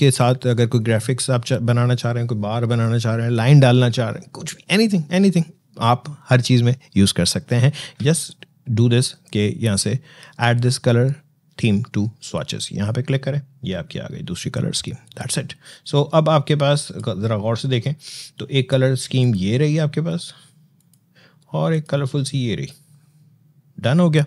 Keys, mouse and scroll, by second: 12.1 click, 14.9 click, 22.9-24.2 scroll down 1.